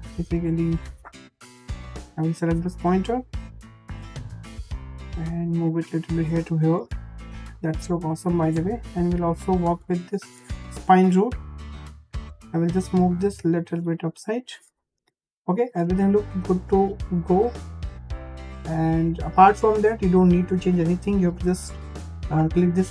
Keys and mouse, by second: 0.0 click, 0.7 click, 0.8 click, 2.1 click, 2.8 click, 3.6 drag, 4.4-6.2 drag, 7.0-7.8 shift+middle drag, 8.7 `, 10.6 `, 12.0 click, 13.0 click, 13.1 click, 15.0 `, 17.9-19.0 shift+middle drag.